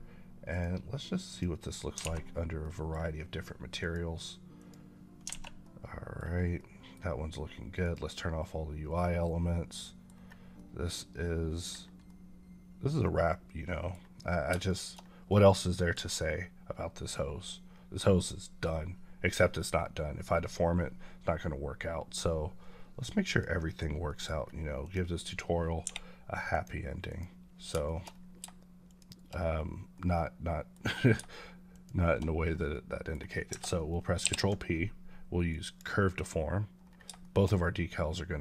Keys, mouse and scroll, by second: 1.6 click, 2.0 alt+a, 2.5 middle click, 3.7 click, 4.9 click, 5.3 a, 5.5 middle click, 6.4 middle click, 8.0-9.1 drag, 9.1 middle click, 10.1-10.4 scroll up 2, 10.4-11.6 middle drag, 11.6 scroll down 2, 14.5 shift+middle click, 14.9 middle click, 23.2 click, 24.0 middle click, 24.2 scroll up 1, 24.7 click, 25.7 h, 26.4 click, 27.7 shift+middle click, 27.9 scroll up 1, 28.7 shift+click, 29.2 click, 29.5-29.8 scroll down 2, 29.8 middle click, 30.7 scroll up 1, 31.6 shift+click, 32.4 scroll down 1, 32.6 middle click, 34.1 ctrl+p, 35.4 click, 36.7 scroll down 1, 37.1 shift+middle click.